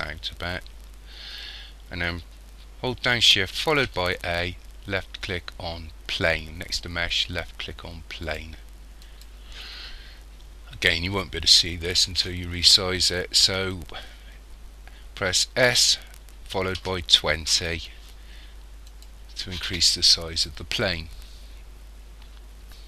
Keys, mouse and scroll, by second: 0.3-0.7 scroll down 1, 3.9 shift+a, 15.7 s.